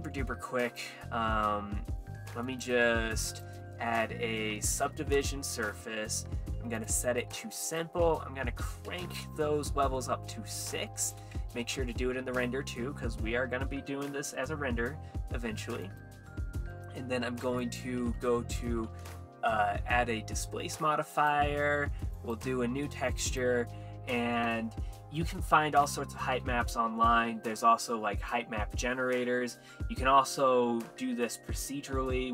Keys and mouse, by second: 0.6 click, 2.5 click, 3.3-5.2 drag, 6.8 click, 7.1 click, 7.7-8.9 drag, 11.1 click, 15.9 click, 16.7 click, 17.6-19.0 drag, 21.1 click, 22.2 click, 23.2 click.